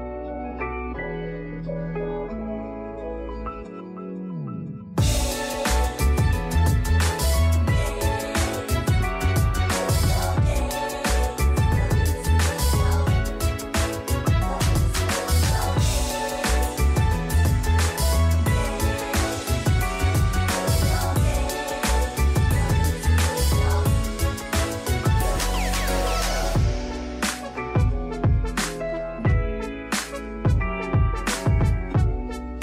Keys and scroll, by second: 2.8 1, 7.6 z, 9.6 r, 11.5-12.2 typing, 13.9 typing, 14.1 Return, 15.8-16.6 typing, 18.3 Return, 29.9 x.